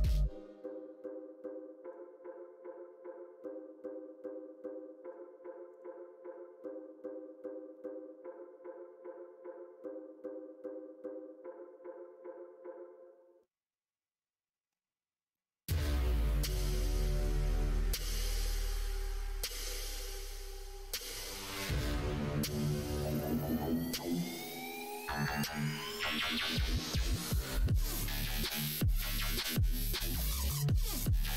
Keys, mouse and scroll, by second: 7.7-14.6 middle drag, 15.3 middle click.